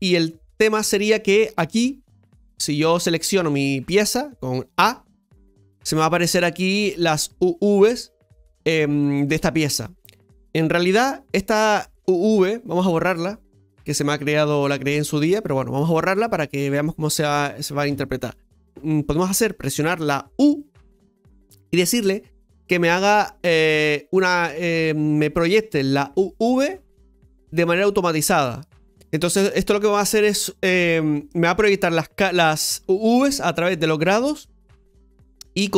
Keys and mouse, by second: 2.4-4.8 shift+middle drag, 4.8 a, 13.6 click, 15.1-18.3 drag.